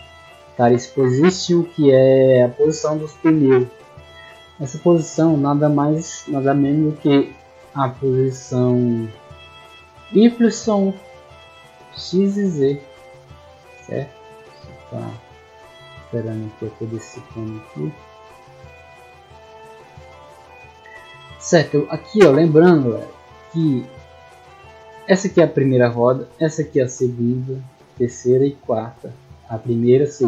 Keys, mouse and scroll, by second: 4.5-5.2 middle drag, 5.5 right click, 7.1 click, 8.1 click, 8.7 click, 9.3 click, 9.7 click, 10.1-11.0 drag, 11.3 middle click, 11.3 scroll down 1, 13.6 right click, 14.6 click, 15.6 click, 16.4-17.5 drag, 18.5-19.4 scroll down 1, 19.4 click, 20.9 middle click, 23.5 scroll up 1, 25.1 right click, 25.6 right click, 26.0 middle click, 26.8 right click, 27.8 right click, 28.4 right click, 29.5 click, 30.1 click.